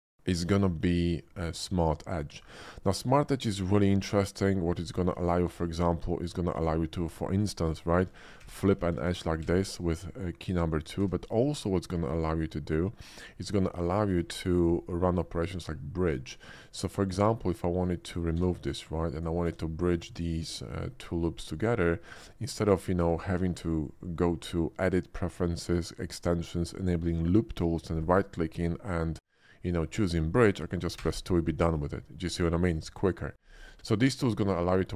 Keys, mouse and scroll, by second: 0.5 click, 1.3 middle click, 2.4 Tab, 3.5 ctrl+r, 3.9 middle click, 3.9 scroll up 1, 4.8 click, 5.5 ctrl+r, 6.5 click, 6.6 right click, 7.0 Tab, 7.3 click, 7.7 middle click, 8.4 2, 8.9 2, 10.1 middle click, 10.8 middle click, 11.0 Tab, 11.5 click, 12.1 ctrl+click, 14.1 ctrl+r, 14.6 click, 14.7 right click, 15.0 middle click, 15.0 scroll up 1, 15.2 middle click, 15.2 scroll down 1, 15.5 Tab, 16.0 click, 17.5 ctrl+click, 18.0 middle click, 18.3 x, 19.1 click, 19.4 Tab, 20.1 click, 20.8 click, 21.4 ctrl+click, 22.1 ctrl+z, 22.8 ctrl+shift+z, 23.3 ctrl+click, 27.9 right click, 31.1 2, 34.0 middle click.